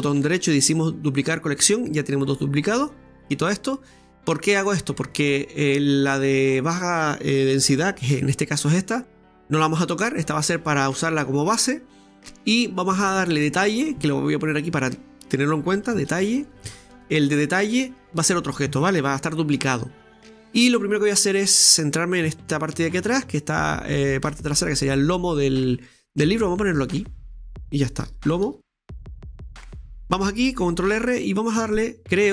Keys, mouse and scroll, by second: 3.1-6.1 drag, 12.8-16.5 drag, 18.0 middle click, 20.3 click, 21.1-22.4 middle drag, 22.4 right click, 22.9-24.6 middle drag, 24.5 scroll down 2, 24.8 shift+middle click, 25.3-26.6 scroll up 2, 26.6-29.7 drag, 26.6 scroll up 2, 29.8-30.9 middle drag, 30.9 ctrl+r.